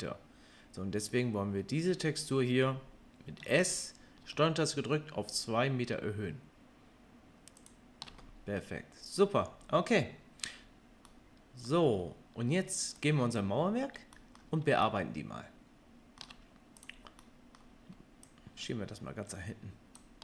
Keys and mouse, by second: 3.4 s, 7.7-13.0 ctrl+middle drag, 13.0 click, 13.0-16.8 middle drag, 16.8 click, 16.8-18.2 middle drag, 18.2-20.2 drag.